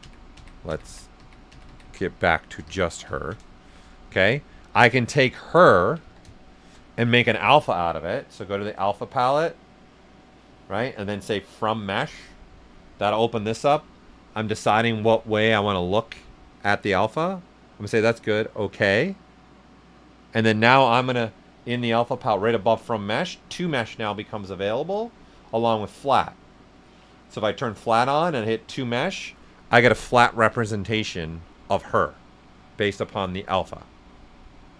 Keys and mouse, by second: 2.6 ctrl+shift+z, 3.1 ctrl+right click, 3.5 shift+f, 4.1 alt+right click, 6.0 ctrl+right click, 6.0 s, 6.1-8.1 drag, 12.2 click, 18.0 click, 21.6 click, 25.4 click, 28.4 click, 29.7-33.6 right drag, 33.6 shift+f.